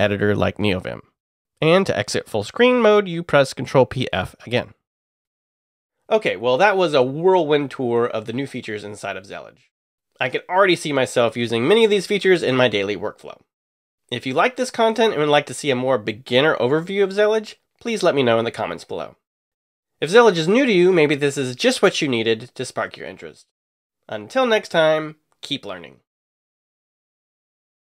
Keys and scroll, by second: 3.8 ctrl+p, 5.2 f, 17.4 w.